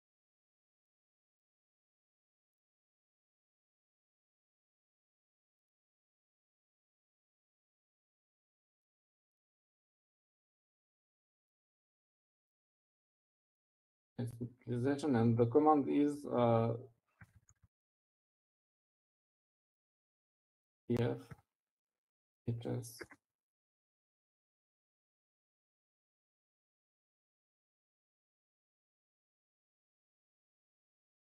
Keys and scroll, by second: 0.2 Right, 0.3 Right, 0.5 Right, 0.7 Right, 0.8 Right, 1.3 Right, 1.5 Right, 2.2 Right, 2.5 Right, 3.2 Right, 4.3 i, 7.5-11.2 typing, 29.7 Left, 30.2 Left.